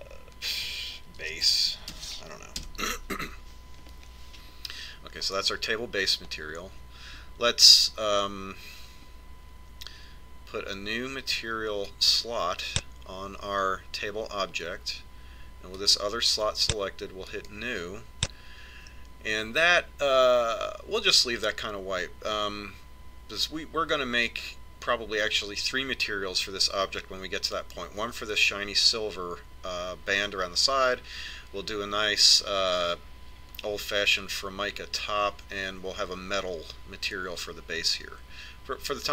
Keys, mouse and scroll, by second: 12.7 click, 16.6-19.9 drag.